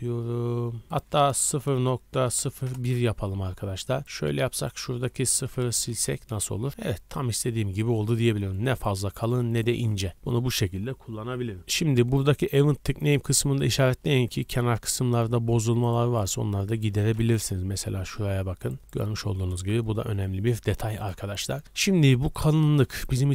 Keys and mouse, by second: 7.0 z, 8.5-13.1 drag, 13.1-14.4 middle drag, 16.9-18.6 shift+drag, 16.9 shift+b, 18.7 click, 19.0 click, 22.0-22.9 shift+middle drag, 22.9-23.3 drag.